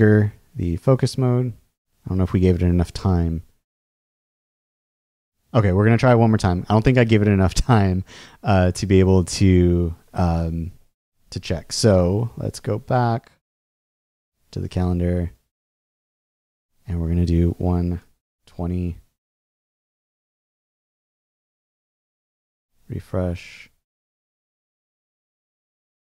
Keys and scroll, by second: 17.8-18.8 typing, 22.4 super+r.